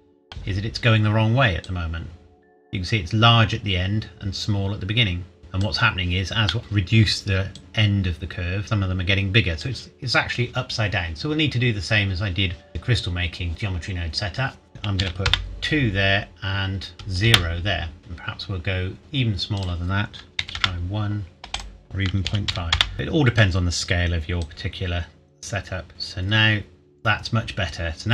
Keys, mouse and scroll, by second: 1.6 click, 6.5 middle click, 7.5 click, 11.6 scroll up 1, 14.7 click, 15.0 KP_2, 15.2 KP_Enter, 16.9 KP_0, 17.2 KP_Enter, 18.0 click, 18.6-19.0 scroll down 1, 19.6 click, 20.4 KP_1, 20.6 KP_Enter, 21.5 click, 22.2 KP_Decimal, 22.5 KP_5, 22.7 KP_Enter, 22.9 middle click, 24.4 click.